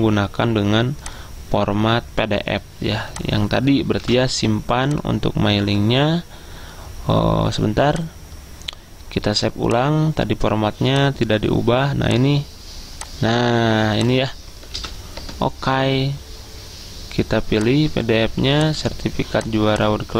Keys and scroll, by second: 4.1 ctrl+v, 14.8 ctrl+v, 15.3 Return.